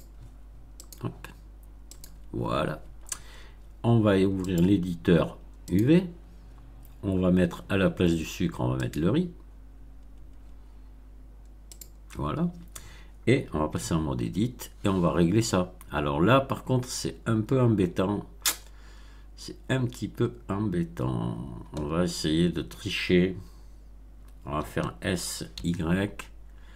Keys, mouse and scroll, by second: 0.7 click, 1.8 click, 4.4 click, 5.6 click, 8.7 click, 11.6 click, 13.6 Tab, 24.5 s, 25.5 y.